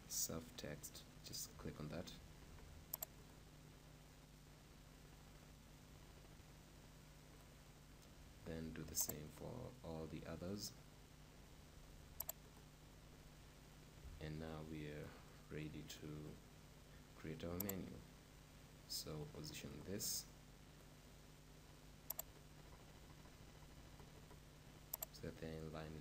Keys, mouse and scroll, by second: 2.3 alt+c, 7.5-9.5 right drag, 8.5 alt+c, 10.9-12.7 right drag, 11.6 alt+c, 13.5 middle click, 14.2-15.3 middle drag, 15.3-18.0 right drag, 17.7-19.6 drag, 20.2-22.8 right drag, 22.2-24.1 drag, 25.0-26.0 drag.